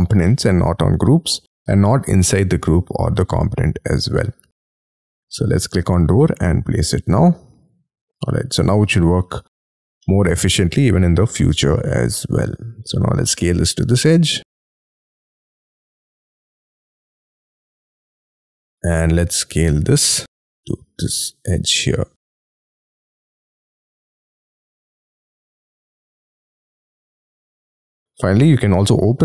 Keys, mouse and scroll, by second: 0.2 middle click, 0.9 scroll up 1, 6.2 scroll up 5, 8.3 space, 10.0 middle click, 11.0 scroll up 4, 11.5 y, 12.0 scroll up 3, 12.4 s, 14.0 scroll up 5, 14.8-15.3 scroll down 5, 18.6 scroll down 3, 18.9 s, 20.3 scroll up 6, 21.6-22.1 scroll up 12, 22.3 middle click, 26.3-26.9 scroll down 25, 27.0 middle click, 27.5 y.